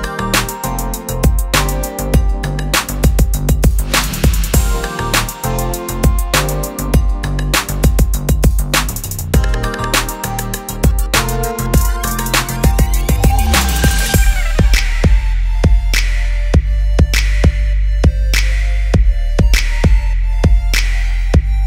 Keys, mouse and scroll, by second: 0.8 right click, 2.3 click, 4.0-5.4 typing, 7.0 click, 7.7 t, 8.9 BackSpace, 9.4 click, 9.7 right click, 10.5 click, 11.6 right click.